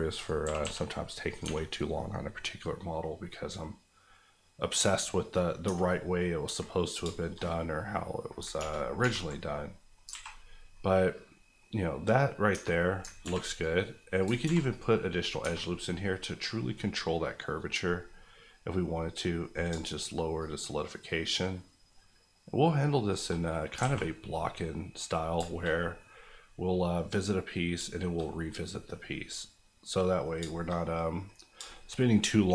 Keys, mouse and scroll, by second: 0.1 click, 0.4 g, 0.6 g, 1.3 click, 1.4 Tab, 1.9-2.3 scroll down 1, 2.3 middle click, 3.2 middle click, 5.4 scroll up 1, 5.6 Tab, 5.9 middle click, 6.3 scroll up 1, 6.4 Tab, 7.0 shift+Tab, 7.1 shift+middle click, 7.3 middle click, 8.5 ctrl+middle click, 8.5 ctrl+1, 9.0 ctrl+2, 9.5 middle click, 9.9-10.4 scroll down 2, 10.1 alt+a, 10.7 middle click, 11.6 scroll up 1, 13.1 ctrl+scroll up 1, 13.2 ctrl+r, 13.5 click, 14.3 ctrl+click, 14.4 ctrl+r, 14.7 click, 15.4 Tab, 15.8 middle click, 17.5 scroll, 17.6 scroll down 1, 17.8 middle click, 18.9 scroll up 1, 19.7-20.4 shift+scroll up 1, 20.4 shift+click, 20.8 click, 21.3 shift+click, 21.5 click, 23.1 shift+click, 23.3 click, 23.5-24.2 scroll down 3, 23.8 alt+a, 24.4 middle click, 25.0-25.7 scroll down 4, 25.4 shift+middle click, 25.9-27.7 middle drag, 27.7 shift+middle click, 28.2 scroll down 1, 28.4-30.3 middle drag, 30.4 shift+middle click, 30.7 middle click, 31.5 shift+middle click, 31.9 middle click.